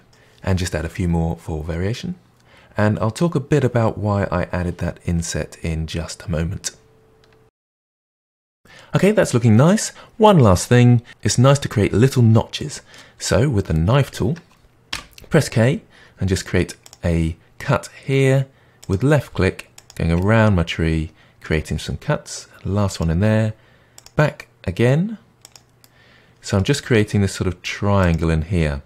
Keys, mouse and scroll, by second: 0.3 ctrl+r, 0.4 middle drag, 0.6 click, 0.9 g, 1.3-1.9 middle drag, 1.9 click, 1.9 middle click, 2.0 g, 2.2-2.7 middle drag, 2.9 middle drag, 3.0 click, 3.0 Tab, 3.1 middle drag, 3.3 Tab, 3.4 middle click, 3.6 click, 3.6 g, 3.8 middle click, 4.2 click, 4.2 g, 4.4 middle click, 5.0 click, 5.1 g, 5.3 middle click, 5.5 click, 5.7 middle click, 6.4 Tab, 6.4 click, 6.5 Tab, 6.5 middle click, 6.7 click, 6.7 g, 7.2 middle click, 7.4 click, 7.4 g, 7.5 middle click, 8.0 middle click, 8.4 scroll down 1, 8.5 middle click, 9.6-11.1 middle drag, 12.5 middle click, 13.1-13.7 scroll up 1, 13.7-14.9 middle drag, 14.9 k, 20.1-23.1 middle drag, 25.7-28.8 middle drag.